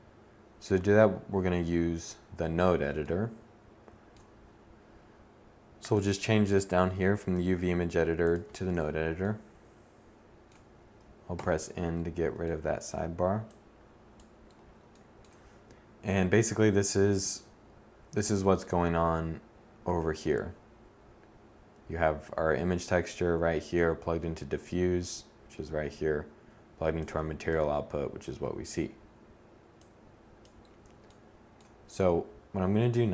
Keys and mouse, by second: 0.8 a, 10.1 n, 32.5 shift+a.